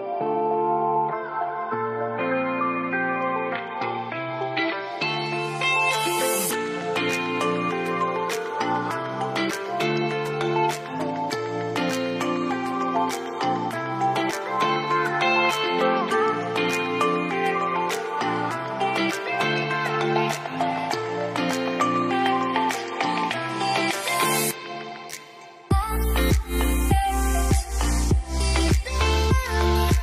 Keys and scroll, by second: 4.4 Delete, 11.9 Delete.